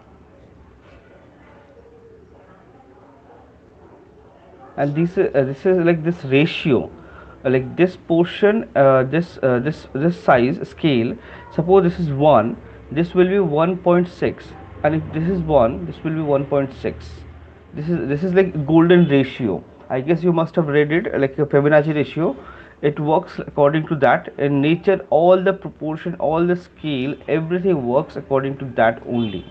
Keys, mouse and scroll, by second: 1.4 [, 1.6 [, 3.6 click, 4.2 ], 4.4 ], 25.2 click, 26.9 click, 29.1 click.